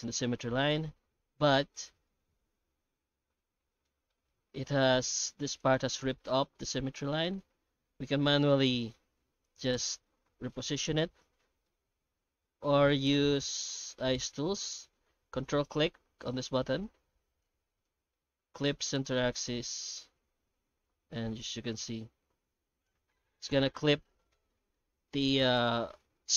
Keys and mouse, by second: 0.2 alt+middle click, 0.6 middle click, 1.0 ctrl+z, 1.5 alt+middle click, 2.5 shift+middle click, 3.1 alt+a, 3.6 middle click, 4.1 shift+middle click, 5.4 2, 5.6 right click, 8.3 g, 10.2 g, 11.6-13.1 middle drag, 13.6 alt+a, 13.8 middle click, 14.4 ctrl+shift+x, 23.9 middle click, 24.7 shift+middle click.